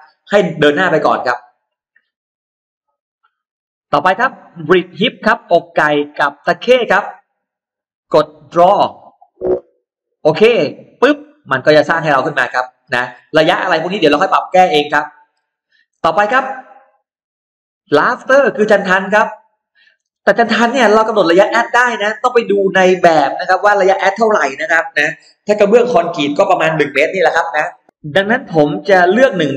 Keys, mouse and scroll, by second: 2.8 click, 6.8 click, 8.6 click, 10.6 click, 11.6 middle click, 12.6-12.9 scroll down 2, 12.9-15.0 middle drag, 15.2-15.5 scroll down 2, 16.7 click, 17.8 click.